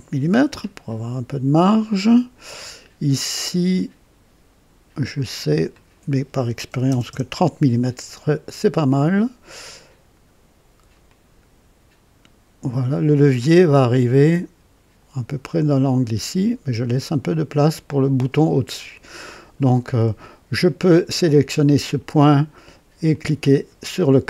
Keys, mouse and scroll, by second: 3.7 click, 5.2 click, 6.6 KP_3, 6.8 KP_0, 7.0 KP_Enter, 11.0-18.2 drag, 23.0 click.